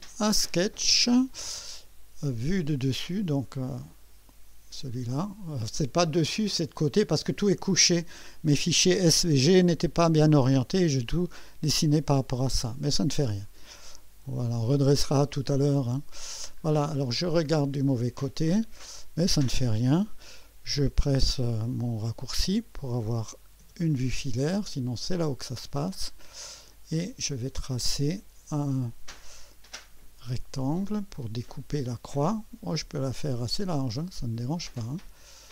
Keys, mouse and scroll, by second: 0.1 click, 3.9 click, 14.2 click, 16.2 scroll up 1, 16.8-17.2 scroll down 2, 18.2-19.2 right drag, 25.5-26.0 right drag, 26.1-26.4 scroll up 1, 26.7-27.3 right drag, 29.8 click, 34.6 click.